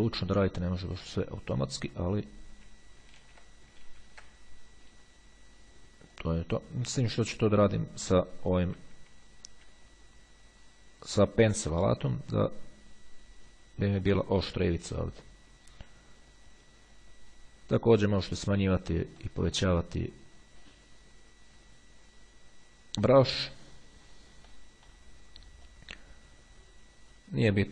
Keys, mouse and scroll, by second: 3.4 ctrl+z, 6.2 click, 9.0 [, 12.8-14.7 drag, 15.1 click, 16.6-18.0 drag, 18.4 [, 19.4 click, 19.5 middle click, 19.8 click, 20.6-23.8 drag, 24.8 middle click, 25.9-27.7 drag.